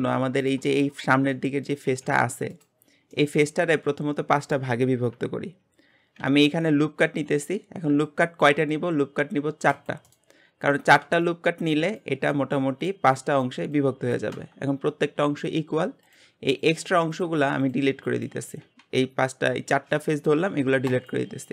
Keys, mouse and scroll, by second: 0.4 click, 0.8-2.0 shift+middle drag, 2.0 g, 2.8 scroll down 2, 3.1-6.2 middle drag, 6.2 ctrl+r, 16.0 click, 17.1 shift+click, 17.6 shift+click, 18.0 shift+click, 18.7 x.